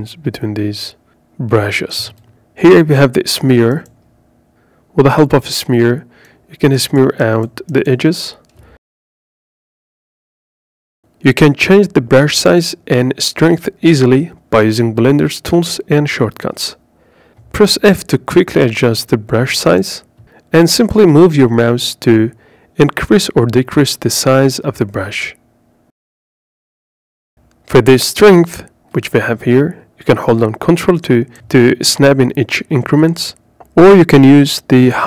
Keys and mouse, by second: 0.3 ctrl+click, 3.8-7.9 drag, 9.7-13.6 middle drag, 15.7 f, 18.5 click, 19.6 f, 25.3 click, 31.6 click.